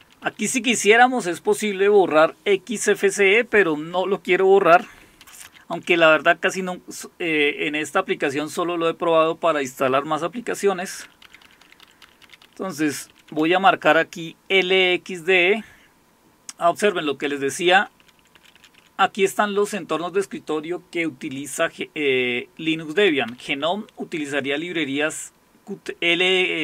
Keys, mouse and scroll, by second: 0.0 Down, 0.2 Down, 5.2 Down, 5.5 Down, 5.7 Up, 5.9 Up, 11.0 Down, 11.2 Down, 11.5 Down, 11.7 Down, 11.8 Down, 12.2 Down, 12.5 Down, 12.9 Up, 13.1 Up, 13.3 Up, 17.8 Up, 18.0 Up, 18.2 Up, 18.3 Up, 18.5 Up, 18.8 Up, 19.1 Up, 19.5 Up, 23.3-24.1 scroll down 2.